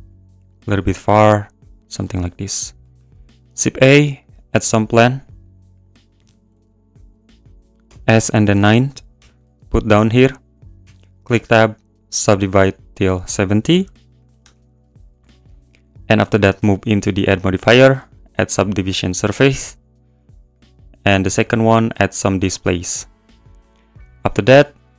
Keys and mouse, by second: 1.8 click, 2.0 n, 2.1 click, 2.9 shift+a, 4.6 s, 5.7 click, 6.5 ctrl+z, 7.8 s, 8.3 9, 8.5 click, 9.1 g, 9.2 z, 10.2 click, 10.8 Tab, 11.3 right click, 13.0-14.4 drag, 15.2 Tab, 18.1-19.4 drag, 20.6-23.3 drag.